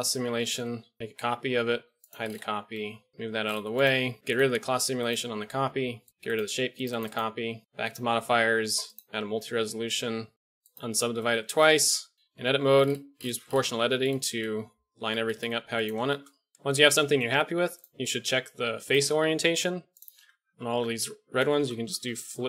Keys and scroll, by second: 0.5 shift+Left, 1.0 shift+d, 1.7 h, 2.7 g, 3.2 alt+h, 11.3-12.1 typing, 12.1 Tab, 15.2 g, 20.1 Tab, 20.4 a, 20.6 a, 21.4 space.